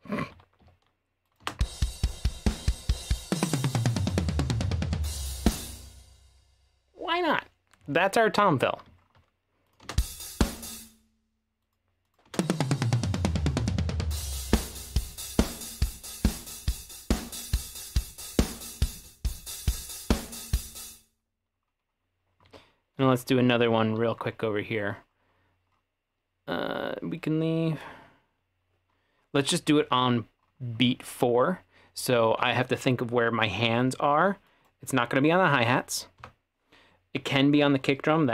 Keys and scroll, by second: 0.3 w, 0.6 w, 1.4 space, 5.5 space, 8.4 w, 9.8 space, 10.8 space, 20.8 space, 22.5 e, 36.2 BackSpace.